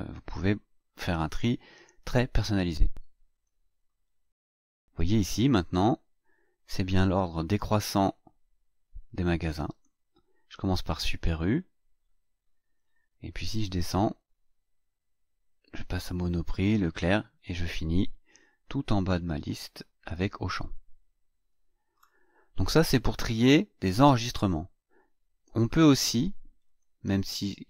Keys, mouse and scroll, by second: 3.3 click, 9.6 click, 10.4-10.8 scroll down 1, 11.0-13.0 scroll down 7, 14.2-22.1 drag, 26.6 click.